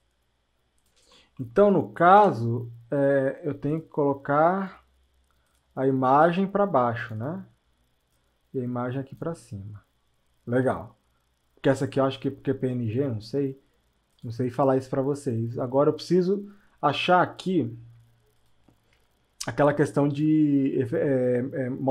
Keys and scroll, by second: 2.2 Return.